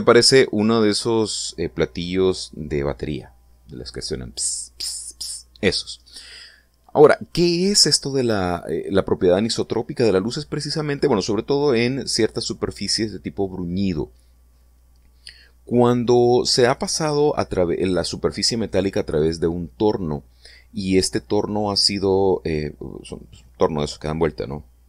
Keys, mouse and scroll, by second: 0.1-0.5 scroll up 3, 0.8-1.9 shift+middle drag.